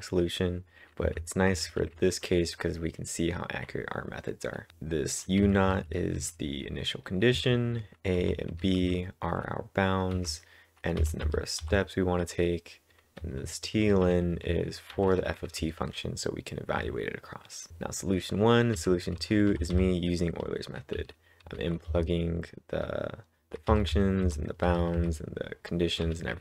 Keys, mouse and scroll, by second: 0.8-2.3 typing, 4.7 typing, 5.9-6.7 typing, 7.9-9.3 typing, 11.4-12.1 typing, 13.8-16.3 typing, 23.5-25.2 typing.